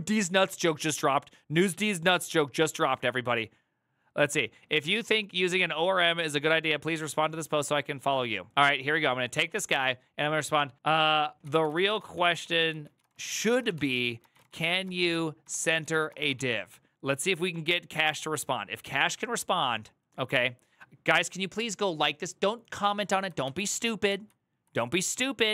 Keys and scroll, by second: 11.0-16.6 typing, 23.2 ctrl+c, 23.8 alt+[.